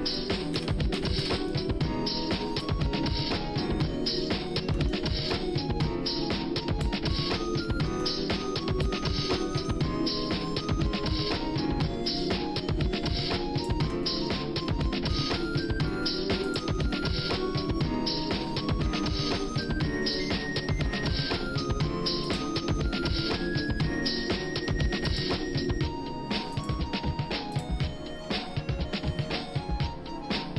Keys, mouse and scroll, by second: 0.5 w, 0.9 w, 1.3 w, 2.6-6.8 drag, 7.2 shift+middle click, 8.8-13.7 drag, 14.3 scroll down 1, 14.7 middle click, 15.1-15.4 scroll up 2, 15.4 scroll down 1, 15.9 middle click, 16.4 click, 16.9 shift+middle click, 19.6 shift+middle click.